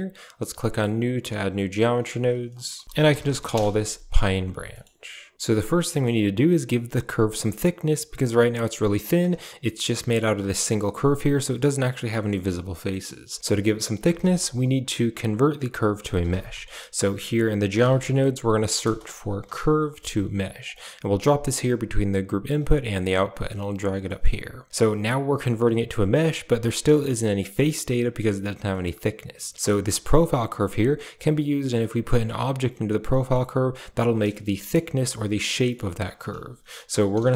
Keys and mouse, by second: 0.7 click, 2.0-3.4 drag, 4.6 middle click, 5.6 middle click, 5.8 shift+middle click, 8.3 a, 9.0 click, 9.5 a, 11.8 shift+click, 12.2 click, 12.7 click, 13.9 shift+a, 22.8 click, 23.9 middle click, 26.9-27.5 middle drag, 28.5 middle drag, 33.1 middle drag, 34.2-34.6 shift+middle drag, 35.5 middle click, 35.9 shift+a.